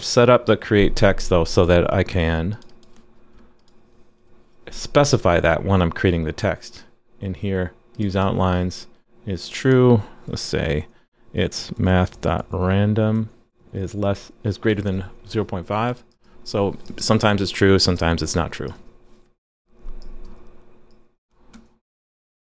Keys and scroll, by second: 0.3 super+b, 4.2 super+d, 14.8 super+s.